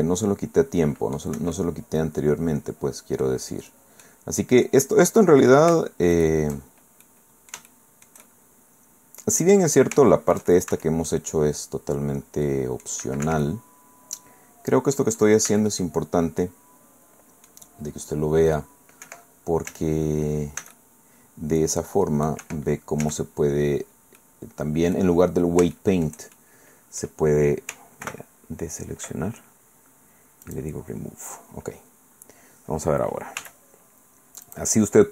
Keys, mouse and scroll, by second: 0.2-1.4 drag, 1.4 Escape, 1.5-3.4 drag, 4.0 click, 6.1 shift+middle click, 7.0-9.2 middle drag, 9.2 click, 9.7-11.0 scroll up 2, 9.9 shift+click, 10.7 shift+c, 11.1-13.0 shift+drag, 13.2 Escape, 13.4-15.2 drag, 15.5 c, 15.7-17.7 drag, 18.0 scroll up 1, 18.3-18.7 scroll down 1, 19.0 Escape, 20.0 z, 20.6 c, 20.7-22.5 drag, 22.4 Escape, 23.0 z, 23.2-23.8 scroll down 1, 24.2 click, 25.7-27.2 shift+drag, 28.0 ctrl+i, 30.4 click, 33.4 a, 34.5 click.